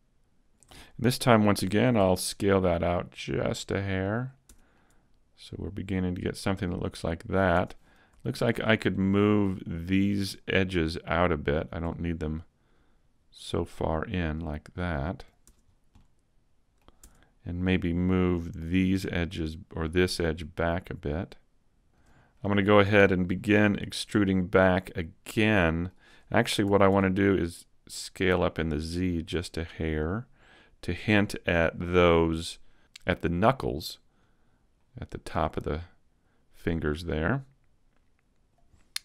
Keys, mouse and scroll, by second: 0.3-1.6 scroll down 2, 1.6 s, 4.2 click, 4.5 Tab, 4.7 middle click, 7.5 Tab, 7.9 scroll up 2, 8.2 shift+middle click, 8.6-8.9 scroll up 2, 8.9 middle click, 10.3 right click, 11.5 shift+right click, 11.9 middle click, 13.5 click, 15.7 Tab, 15.7 scroll down 3, 15.9 middle click, 17.0 Tab, 17.5-18.6 scroll up 1, 19.0 right click, 20.3 click, 22.3 middle click, 23.8 middle click, 26.6 s, 29.1 click, 29.3-29.7 scroll down 1, 29.7 middle click, 32.4 middle click, 33.5-34.6 scroll down 1, 35.7 click, 37.3 middle click, 38.8 click.